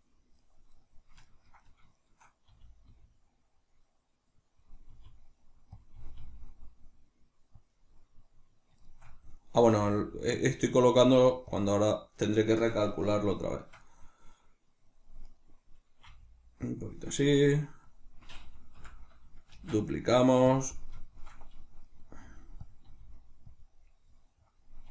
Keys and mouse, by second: 0.5 right click, 1.2-4.6 ctrl+middle drag, 2.5 r, 4.6-8.0 drag, 4.9 r, 6.0 r, 8.0-11.6 middle drag, 9.7 g, 11.1 g, 11.6 click, 11.7-15.3 middle drag, 15.3 right click, 16.1 g, 16.7 click, 17.3 right click, 18.7 l, 19.6 shift+d, 20.6 click, 20.8-22.8 shift+middle drag, 22.2 g, 22.8 click, 22.8 r, 23.6 click, 23.8-24.9 middle drag.